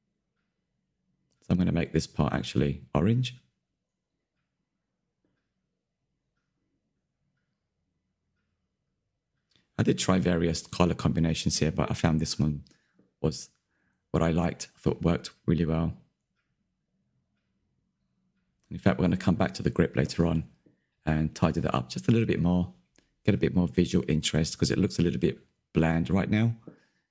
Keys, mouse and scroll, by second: 0.1 scroll down 2, 0.1 middle click, 0.3 scroll up 1, 0.6 ctrl+KP_Add, 0.7 ctrl+KP_Add, 0.9 middle click, 1.1 scroll up 1, 1.2 middle click, 1.6 ctrl+KP_Add, 2.1 ctrl+KP_Add, 2.6 click, 3.0 Tab, 3.1 click, 3.2-3.7 scroll down 13, 3.5 shift+middle click, 3.7-5.6 middle drag, 5.6 click, 5.8 middle click, 6.8 click, 7.1 scroll up 4, 7.2 shift+middle click, 7.5 click, 7.6 middle click, 8.4 click, 8.8 scroll down 1, 8.9-9.5 middle drag, 10.0 click, 10.8 s, 11.3-11.8 scroll down 10, 11.8-13.6 drag, 13.8 click, 13.9-16.0 middle drag, 16.8-18.0 middle drag, 18.0 click, 18.7 click, 19.3 Tab, 19.5-19.9 scroll up 4, 19.9 a, 20.0 a, 20.8 l, 21.2 alt+Left, 21.6 ctrl+KP_Add, 21.9 KP_Decimal, 22.1 middle click, 22.4 z, 22.5 middle click, 22.9 ctrl+KP_Add, 23.1 ctrl+KP_Add, 23.3 middle click, 24.7 click, 24.8-27.1 middle drag.